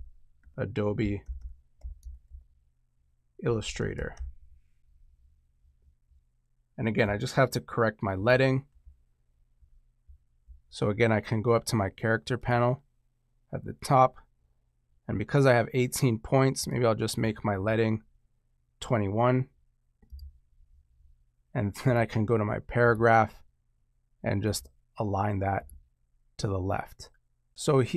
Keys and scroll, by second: 0.0-4.6 typing.